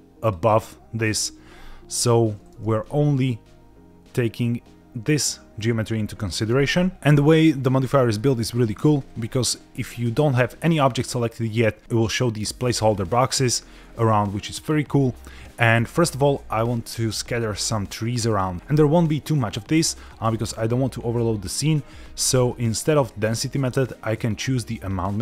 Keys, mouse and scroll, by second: 2.5 Tab, 6.6 Tab, 8.1 middle click, 8.6-9.1 scroll down 3, 9.2 shift+middle click, 16.6 shift+middle click, 18.5-20.0 scroll down 1, 20.0 scroll down 1, 25.0 click.